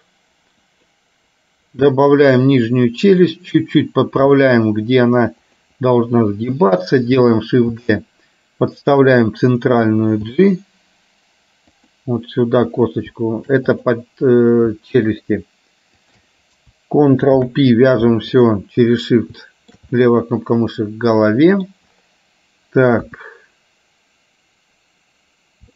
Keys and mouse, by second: 3.2 click, 6.7 click, 7.9 shift+d, 9.7 click, 10.4 g, 13.9 click, 16.1 shift+click, 17.4 ctrl+p, 19.6 shift+middle click, 20.0-21.7 middle drag, 23.1 KP_1.